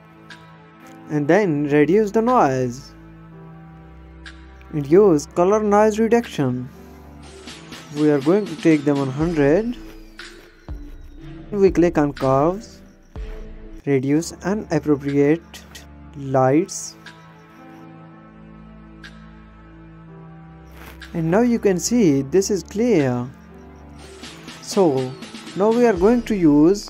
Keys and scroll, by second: 24.4 ctrl+space, 24.9 ctrl+-.